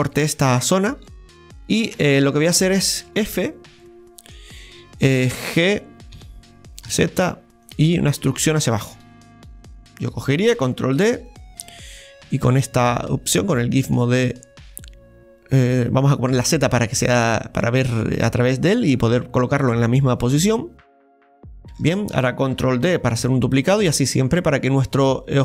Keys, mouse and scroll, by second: 0.5 scroll down 2, 1.1-3.0 shift+middle drag, 1.1 scroll down 1, 3.0 Tab, 3.8-9.9 middle drag, 9.9 Tab, 11.0 shift+d, 12.3-21.5 drag, 21.7-22.8 shift+middle drag, 22.8 shift+d, 23.9-25.4 drag.